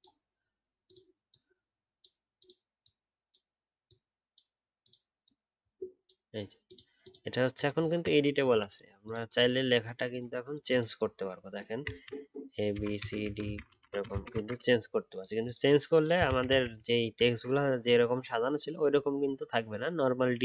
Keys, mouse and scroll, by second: 7.8 alt+scroll down 1, 16.2 ctrl+z, 16.5 ctrl+z.